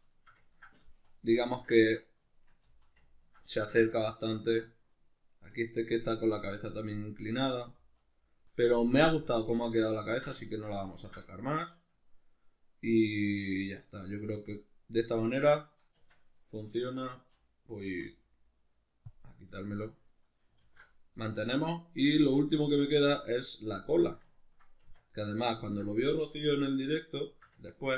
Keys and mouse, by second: 0.8 z, 2.6 z, 7.8 z, 16.0 Tab, 16.3 right click, 17.9 x, 19.7-20.1 shift+middle drag, 20.1 right click, 20.6 alt+q, 22.3-27.9 middle drag, 24.9 Tab.